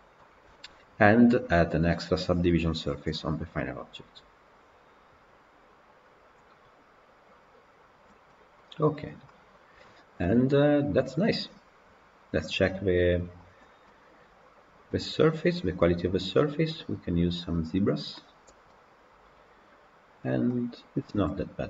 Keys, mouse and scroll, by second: 0.1-7.4 middle drag, 7.4 click, 8.2-8.9 middle drag, 8.9 click, 9.1-9.5 middle drag, 9.5 scroll up 2, 10.0 scroll down 1, 10.1-13.3 middle drag, 13.3 click, 13.7-18.1 middle drag, 18.1-18.6 drag, 18.6-21.6 middle drag.